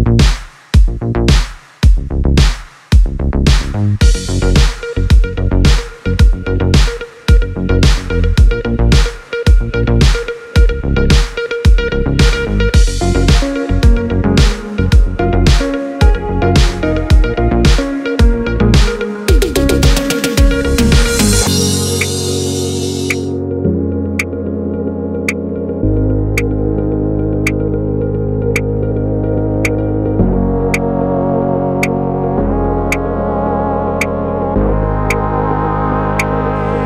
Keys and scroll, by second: 27.9 d, 31.7 u, 34.9 u.